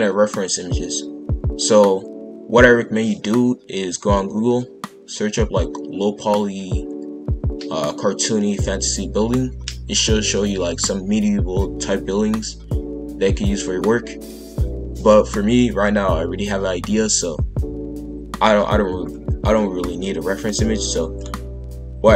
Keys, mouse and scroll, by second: 20.4-22.1 middle drag.